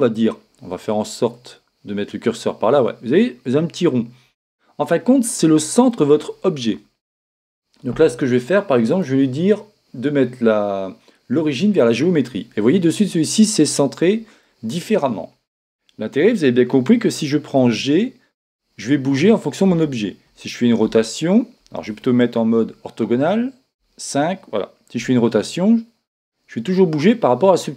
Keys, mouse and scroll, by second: 1.3-3.3 drag, 4.3-6.2 middle drag, 10.5 click, 12.7-14.6 middle drag, 17.6 g, 21.0 r, 22.6 KP_1, 23.8 KP_5, 25.0 r.